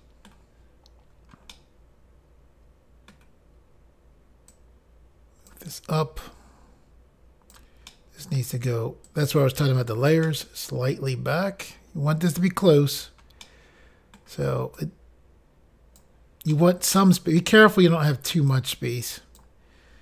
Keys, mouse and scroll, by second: 1.5 middle click, 4.5 click, 6.2 click, 7.9 middle click, 9.1 click, 10.3 middle click, 13.5 middle click, 14.8 click, 16.5 middle click, 18.5 click.